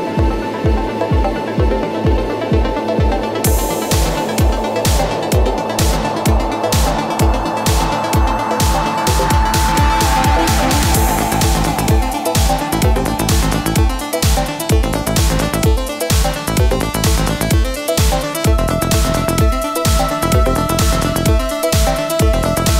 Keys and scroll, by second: 7.5 Left, 16.2 ctrl+j.